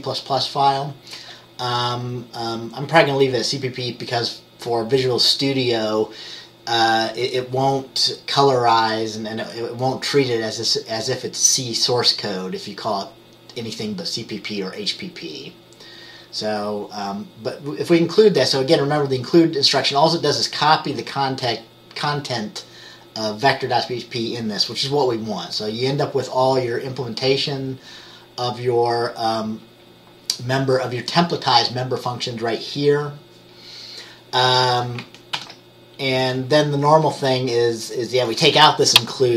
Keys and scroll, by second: 35.4 ctrl+s.